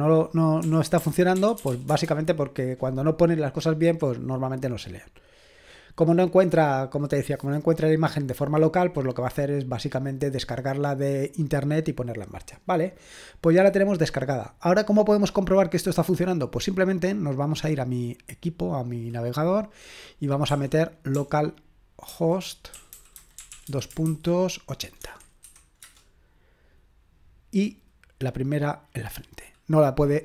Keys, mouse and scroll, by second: 0.0-2.4 typing, 17.6-20.5 drag, 20.5-25.4 typing, 25.8 Return.